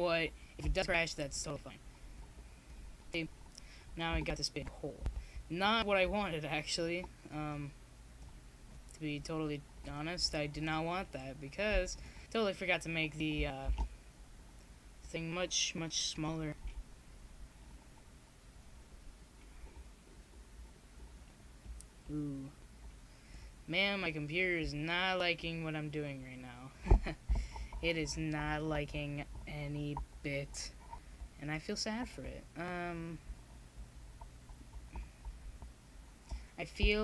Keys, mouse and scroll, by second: 7.7-9.1 middle drag, 9.1-17.5 drag, 17.5-21.6 middle drag, 21.6-29.0 drag, 29.0 middle click, 30.3-33.6 drag, 33.9 ctrl+z, 34.5 ctrl+z.